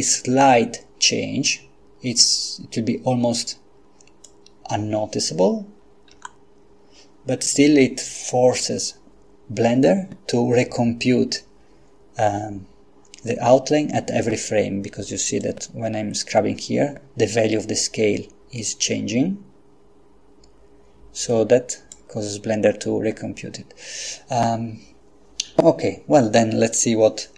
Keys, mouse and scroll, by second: 1.5-4.7 drag, 6.1 i, 15.4-22.4 drag.